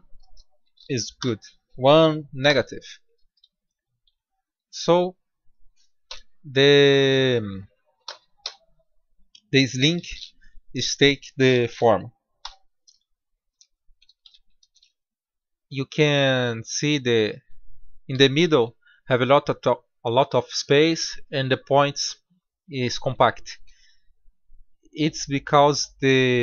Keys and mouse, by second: 2.8-4.5 drag, 4.5 middle click, 5.9 click, 5.9 b, 7.9 g, 13.3 middle click, 14.1 Tab, 16.8-17.3 middle drag, 18.0 KP_7.